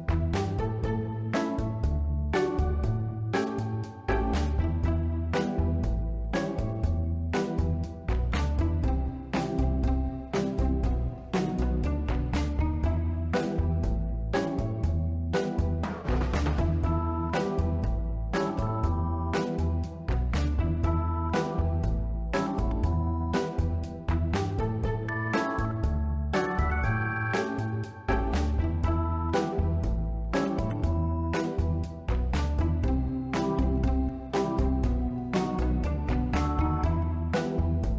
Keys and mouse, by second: 3.4-5.5 middle drag, 5.6 Tab, 6.3 1, 6.5 click, 6.8 b, 7.9-10.3 drag, 10.8 middle click, 12.0 b, 13.1-14.3 drag, 14.5-20.8 middle drag, 21.5 Tab, 23.1 ctrl+middle click, 23.6 ctrl+s, 24.4 middle click, 25.0-25.5 shift+middle drag, 27.5 shift+d, 27.5 shift+Return, 28.6-30.2 drag, 32.5 click.